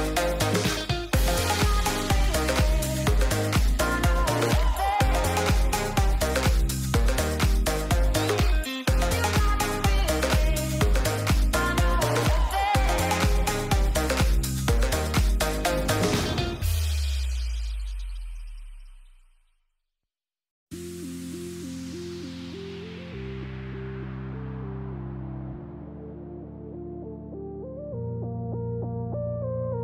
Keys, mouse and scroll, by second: 0.4 n, 1.1 click, 2.0-3.0 drag, 4.1 KP_0, 5.3 n, 6.8 g, 9.9 g, 14.3 click, 17.4-18.3 middle drag, 21.8 click, 22.1 middle drag, 23.1 middle click, 23.5 shift+middle click, 24.3 shift+d, 25.4 KP_0, 26.1 g, 27.8-28.1 middle drag, 28.6 shift+middle click, 29.5 click.